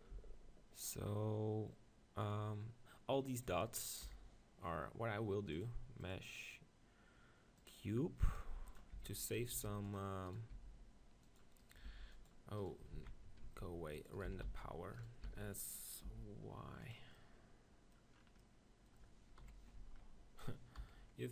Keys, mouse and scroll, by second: 0.2 z, 4.0 KP_7, 5.8-7.4 drag, 8.4 g, 8.8-10.7 drag, 8.9 Tab, 9.2-10.7 right drag, 9.5 ctrl+r, 10.5 s, 10.7-12.2 right drag, 11.3 click, 12.0 ctrl+r, 13.1 ctrl+z, 13.4 ctrl+r, 14.3 s, 15.2 s, 19.4 KP_1, 19.8 z, 20.8 KP_1.